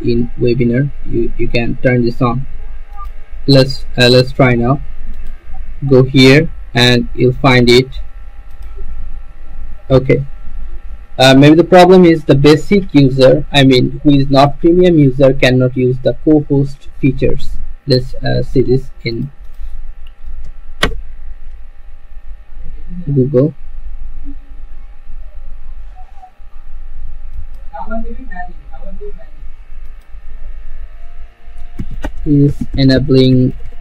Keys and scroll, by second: 20.6 ctrl+v, 21.0 Return, 22.5 Return.